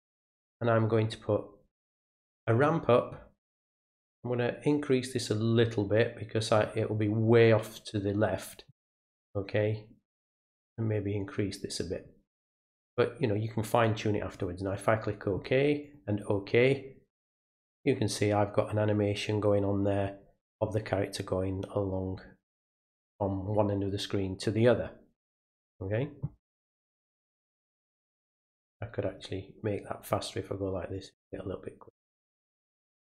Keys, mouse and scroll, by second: 2.0 click, 4.1-6.5 drag, 10.5-11.8 drag, 14.3 click, 15.8 click, 29.2 click, 30.9 click, 32.2 click.